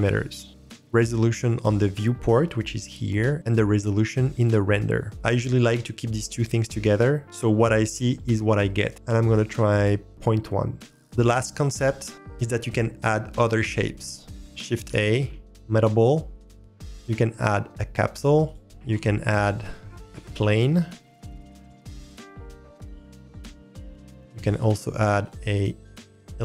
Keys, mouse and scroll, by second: 5.1-9.8 drag, 9.8-10.9 middle drag, 14.8 shift+a, 18.6 click, 18.6 scroll down 1, 18.8 shift+a, 21.4-21.8 drag, 24.1 shift+s, 24.1 shift+a.